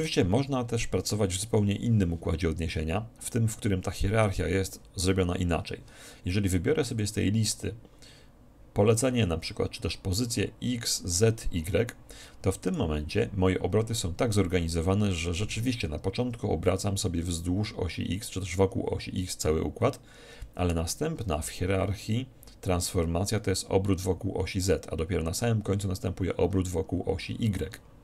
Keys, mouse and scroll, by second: 0.1-1.7 drag, 7.0-8.9 drag.